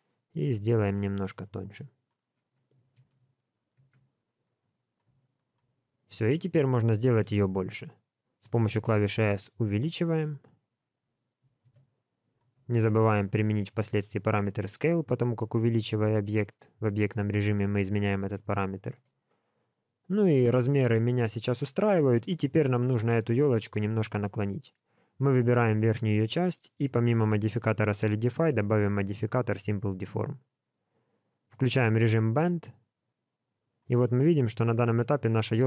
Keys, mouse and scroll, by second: 3.0 alt+a, 3.7 Tab, 4.7 click, 5.4 shift+click, 5.7-6.4 scroll down 4, 6.0 middle click, 7.2 KP_1, 8.8 s, 13.0 ctrl+a, 16.3 middle click, 19.0 middle click, 22.5 KP_1, 24.9 click, 31.8 click, 34.0 middle click.